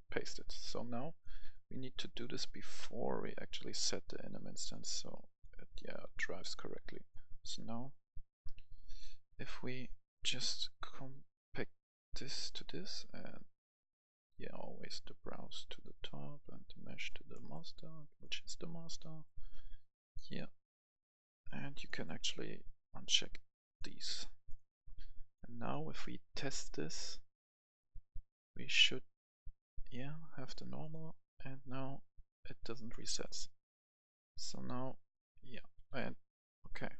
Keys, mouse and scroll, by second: 0.4-7.3 drag, 7.3 right click, 8.0-17.3 drag, 17.3 right click, 18.2-21.8 drag, 21.8 right click, 22.5-35.8 drag, 35.5 w, 35.8 Escape, 36.6 right click.